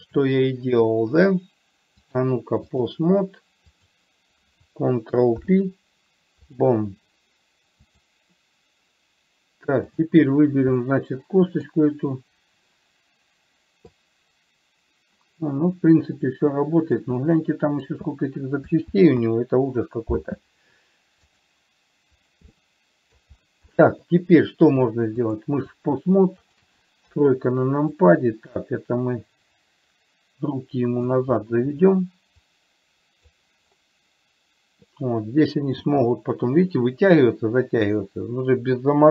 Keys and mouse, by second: 0.3 shift+click, 2.4-3.3 drag, 4.1 click, 5.7 ctrl+p, 8.3-9.3 drag, 11.2-12.1 middle drag, 14.4-17.3 drag, 17.6 middle click, 19.3 ctrl+z, 21.6 click, 22.8 middle click, 24.2 middle click, 25.6 click, 26.8 shift+click, 27.3 KP_3, 28.2-31.4 drag, 32.8 click, 36.2 g.